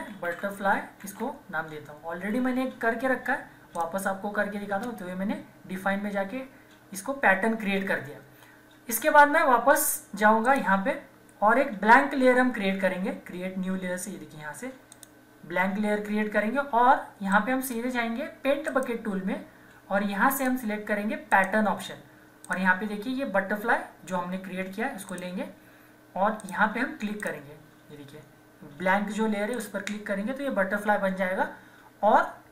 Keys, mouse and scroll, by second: 0.0-1.8 typing, 3.7 click, 10.4 click, 14.9 click, 17.3-18.7 right drag, 18.7 click, 25.1 click, 29.5 click.